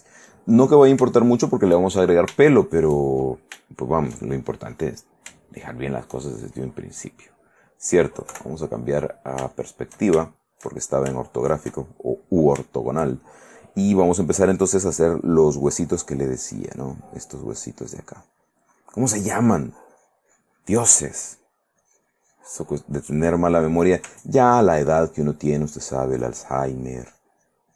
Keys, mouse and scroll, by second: 1.3 shift+middle click, 2.1 shift+middle click, 2.7 shift+middle click, 3.3 shift+middle click, 4.6-5.6 shift+middle drag, 5.8 shift+middle click, 8.5 KP_5, 9.7 shift+middle click, 10.4 shift+middle click, 11.5 shift+middle click, 12.4 middle click, 15.9-17.6 drag, 19.9-21.4 drag, 21.4-22.8 drag, 22.9 middle click, 23.6 click, 24.7 ctrl+click, 25.8-27.7 ctrl+drag.